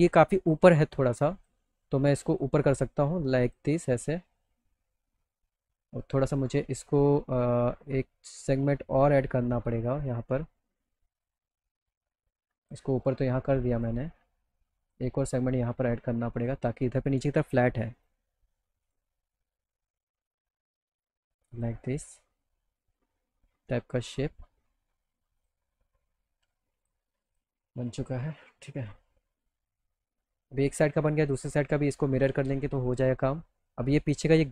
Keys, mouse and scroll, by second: 1.2 click, 2.4-3.6 drag, 5.8 click, 8.3-10.7 drag, 12.4 click, 13.7 click, 14.8 click, 16.4 click, 18.0 right click, 18.9 click, 19.9-21.7 drag, 22.1-24.4 middle drag, 25.4 click, 26.8 click, 27.3 click, 27.9 alt+middle click, 28.6 middle click, 29.0 middle click, 29.3 middle click, 30.7 click, 31.2 middle click, 31.4 alt+middle click, 33.1 alt+middle click.